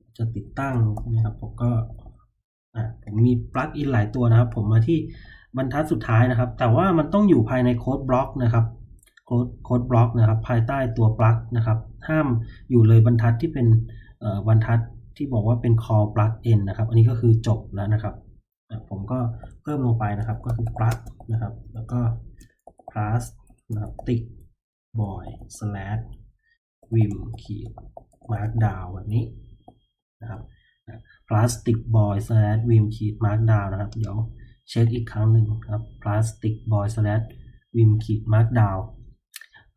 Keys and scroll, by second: 0.0-5.1 typing, 19.3-30.5 typing.